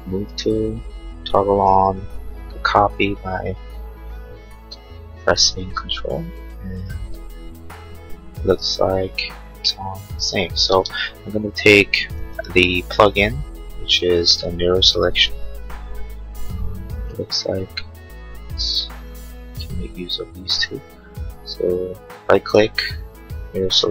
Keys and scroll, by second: 10.7 space.